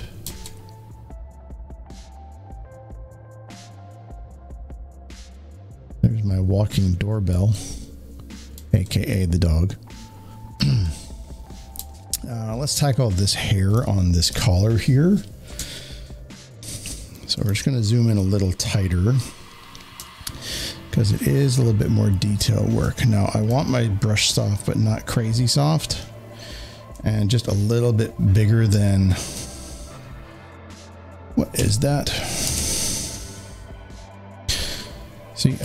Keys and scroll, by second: 11.9 space, 13.7 space, 15.5 z, 15.6 z, 15.8 z, 17.4 space, 17.5 space, 17.6 space, 18.5 s, 31.5 ctrl+z, 35.5 z.